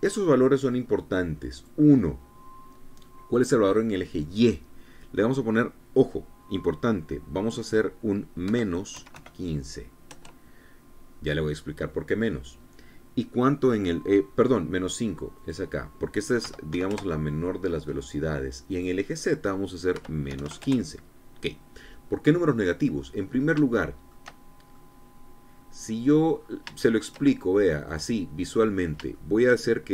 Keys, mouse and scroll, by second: 2.1 click, 9.0 KP_Subtract, 9.5 KP_1, 9.7 KP_5, 10.6 KP_Enter, 15.9 click, 17.0 KP_Subtract, 17.3 KP_5, 17.4 KP_Enter, 19.2 click, 20.5 KP_Subtract, 20.8 KP_1, 20.9 KP_5, 21.2 KP_Enter, 23.0-23.4 scroll down 2, 23.5 scroll down 2, 24.3 shift+click, 24.9-25.2 shift+scroll down 2, 25.3-26.8 middle drag, 26.9-27.2 scroll up 3, 27.3 shift+middle click, 28.4 click, 29.3-29.7 scroll down 3, 29.7 shift+middle click.